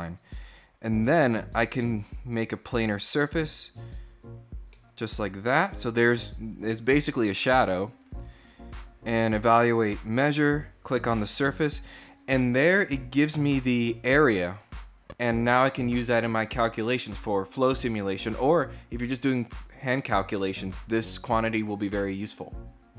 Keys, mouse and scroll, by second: 1.0 click, 1.8 click, 2.9 click, 4.5-5.9 middle drag, 7.7 click, 9.0 click, 10.0 click.